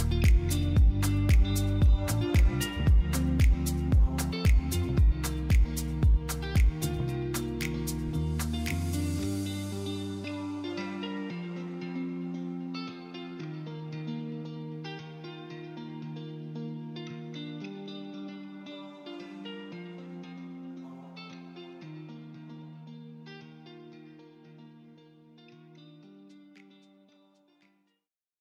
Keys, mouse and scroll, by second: 20.3 shift+click.